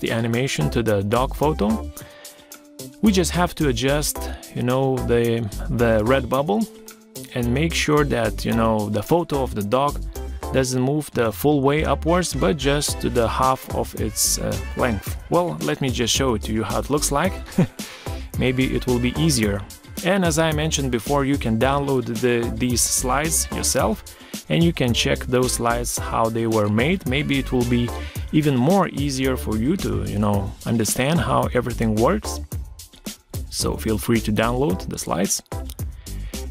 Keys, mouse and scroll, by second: 21.3 Right, 24.5 Escape, 30.7 ctrl+scroll down 1, 34.5 ctrl+d, 35.5 Caps_Lock, 36.4 ctrl+scroll down 1.